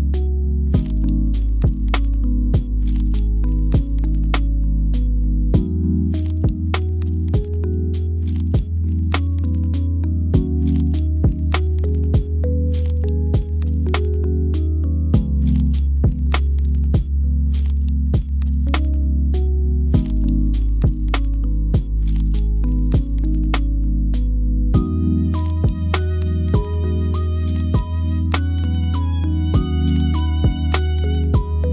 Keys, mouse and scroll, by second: 0.0 click, 0.6 KP_7, 1.4 shift+a, 3.7 Tab, 4.2 1, 5.2 shift+d, 5.6 g, 7.9 g, 11.7 shift+d, 12.2 g, 15.4-17.6 drag, 17.6-18.8 drag, 19.7 shift+click, 20.3 shift+click, 21.8 x, 23.4 click, 24.1 m, 25.2 click, 26.6 click, 31.5 Tab.